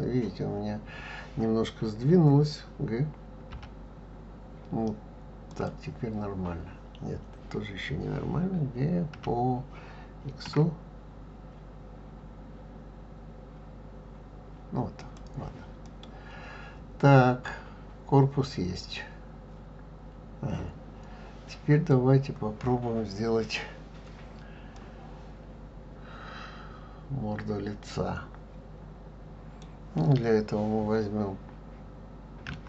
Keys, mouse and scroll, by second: 3.5 g, 9.1 g, 15.8-18.9 middle drag, 24.7-27.8 middle drag.